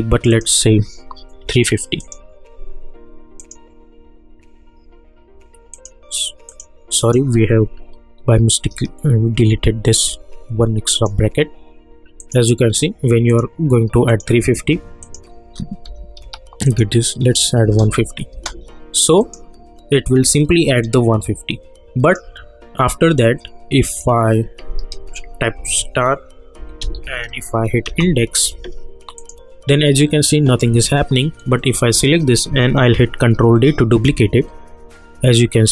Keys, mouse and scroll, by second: 5.7 click, 9.4 ], 10.9 click, 17.6 space, 19.2 click, 22.0 click, 25.5 shift+8, 26.5-27.4 typing, 27.8 Return, 29.2 click, 31.9 click, 34.0 ctrl+d.